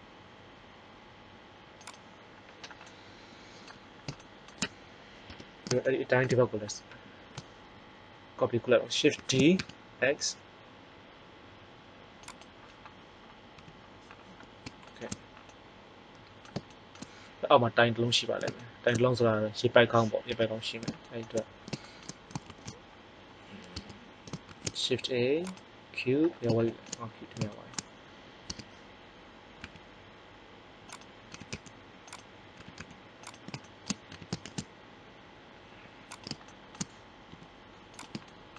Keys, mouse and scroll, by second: 1.9 click, 2.7-4.2 middle drag, 5.2 KP_1, 9.1 shift+d, 13.5 t, 20.2 KP_1, 22.4 shift+a, 23.7 Tab, 24.4 shift+a, 28.4 Tab, 29.6 s, 30.9-32.5 drag, 31.2 s, 32.5 s, 34.0 s, 36.2-37.8 drag, 37.2 g.